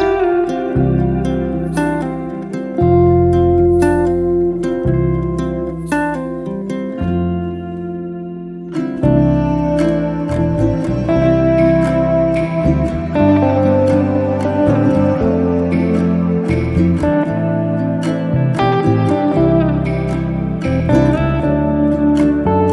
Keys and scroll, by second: 1.5 e, 8.3 p, 10.5 2, 10.7 Return, 13.3 space, 16.5 r, 18.7 space, 22.2 p.